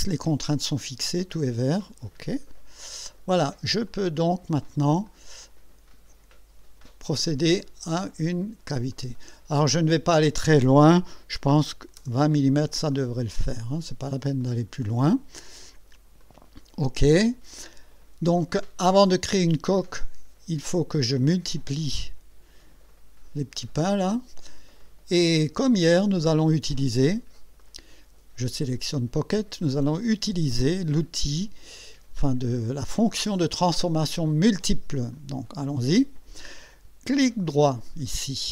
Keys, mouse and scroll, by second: 2.8 click, 3.9 click, 5.1-5.7 drag, 8.9 click, 11.5-12.5 typing, 12.9-14.4 drag, 16.2 click, 19.0-20.8 drag, 27.6 click, 35.1 click, 37.5 right click.